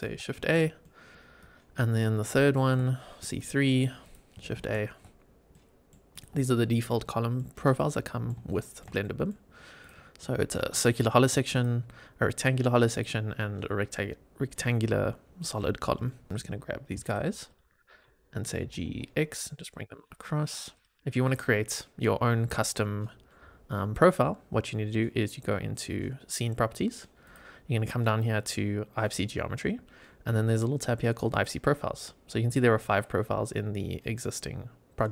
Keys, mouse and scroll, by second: 0.3 shift+a, 0.7-1.0 shift+middle drag, 1.3 shift+right click, 3.2-4.0 drag, 4.5 shift+a, 5.1 scroll down 1, 5.4-5.8 middle drag, 6.0 click, 6.3-6.8 shift+middle drag, 6.9-7.3 middle drag, 7.6 click, 7.9 middle click, 8.4-8.7 shift+middle drag, 8.9 middle click, 9.2 click, 9.8 click, 11.5 click, 12.8 click, 15.1-15.5 scroll down 1, 15.5 middle click, 16.0 shift+middle drag, 16.3 click, 17.0 shift+click, 17.4 shift+drag, 18.5 g, 18.8 x, 20.6 click, 21.1 click, 22.6-23.2 middle drag, 27.2 click, 28.9 click, 31.2 click.